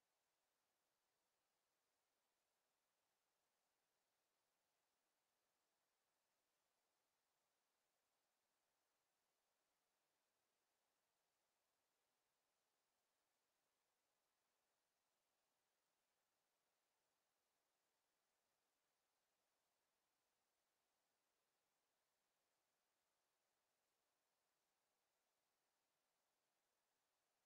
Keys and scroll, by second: 17.1 w, 26.1 w.